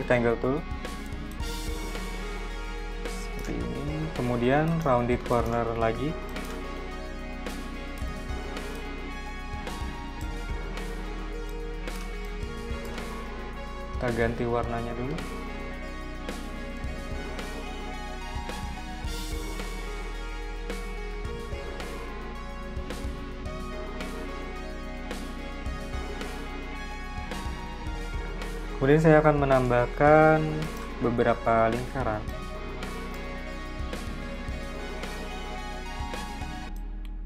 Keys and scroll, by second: 0.0 m, 5.1-7.2 typing, 13.9 x, 21.0 super+z, 35.4 v.